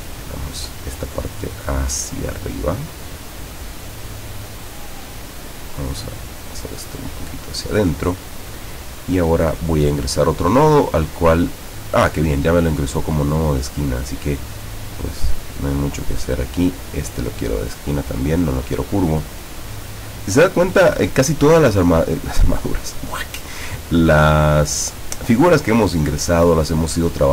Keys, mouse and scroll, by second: 6.0-7.8 drag, 10.3 click, 14.5-16.0 drag, 16.6 click, 18.1 click, 24.5 click, 26.0-27.3 drag.